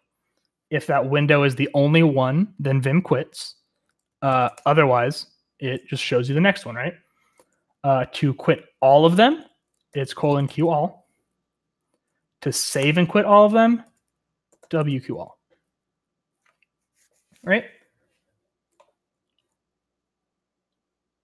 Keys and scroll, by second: 4.2-4.9 typing, 10.0-11.0 typing, 12.8-15.5 typing.